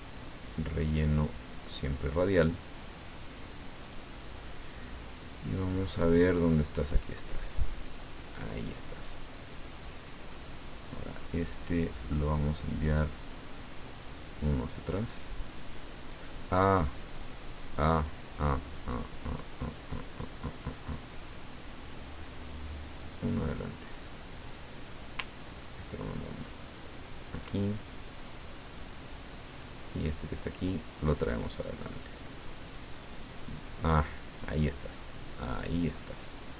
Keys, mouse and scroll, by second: 0.4 click, 1.1 click, 3.8 click, 5.8 scroll down 2, 6.8 click, 12.0 click, 14.0 click, 23.0 click, 25.8-27.8 ctrl+drag, 28.7 click, 29.5 click, 31.3 click, 32.7 click.